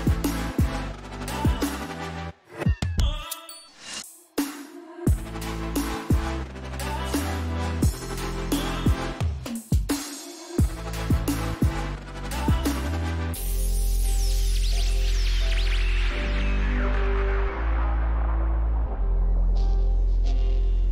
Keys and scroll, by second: 9.9 ctrl+t.